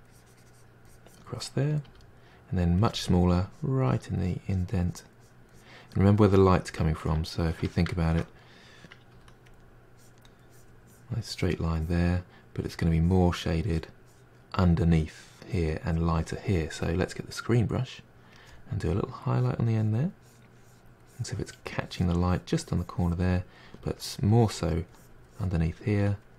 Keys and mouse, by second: 1.9 f, 3.5-7.1 drag, 7.1-9.1 ctrl+middle drag, 9.1 f, 9.9-23.8 drag, 23.8 f, 24.3-25.9 drag, 25.9 f.